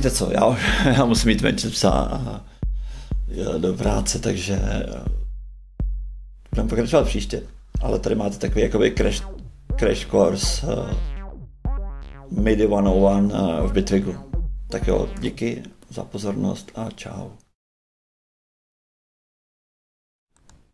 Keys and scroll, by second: 15.1 shift+space.